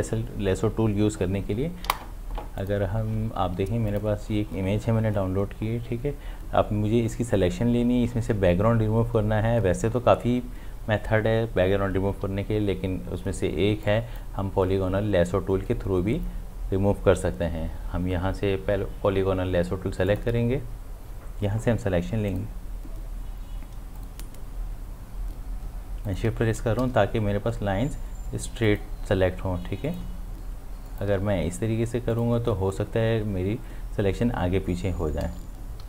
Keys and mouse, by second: 2.6 click, 13.8-20.1 drag, 22.3 click, 28.7 shift+click, 35.3 z.